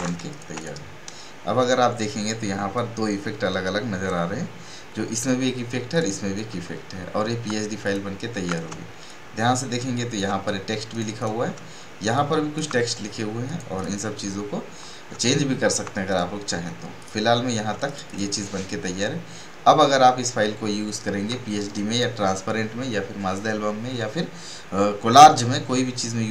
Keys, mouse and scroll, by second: 0.0 space, 0.3 right click, 0.5 click, 5.9 click, 6.7 alt+scroll down 1, 7.8 click, 8.6 space, 9.0-10.9 ctrl+drag, 10.9 right click, 11.1 click, 11.2 click, 12.1 ctrl+click, 13.4 right click, 13.7 click, 15.2 alt+scroll down 1, 16.0 click, 16.1 click, 17.7 space, 17.8 right click, 18.0 click.